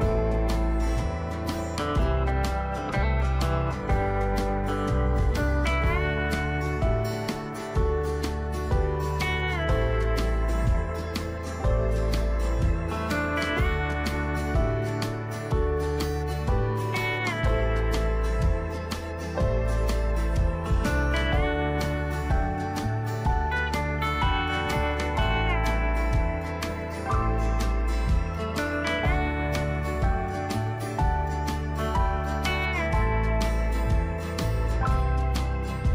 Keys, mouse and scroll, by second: 11.5 alt+click, 13.5 click, 15.0 ctrl+d, 17.2 click, 21.4 shift+click, 23.2 shift+click, 24.9 shift+click, 26.5 click, 31.4 Delete, 31.9 click, 33.0 Delete.